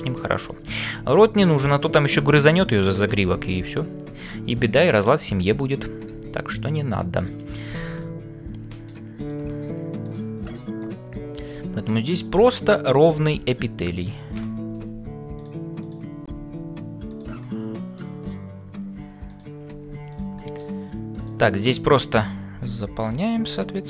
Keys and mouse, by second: 0.1 shift+s, 0.4 click, 2.2 shift+middle click, 3.4 middle click, 5.0 click, 5.5 middle click, 7.8 f, 8.2 middle click, 9.2 click, 10.1 click, 13.4 f, 14.4 click, 14.8 g, 15.9 click, 16.3 g, 17.4 middle click, 20.5 middle click, 21.2 click, 21.8 middle click, 22.5 f, 23.5 click.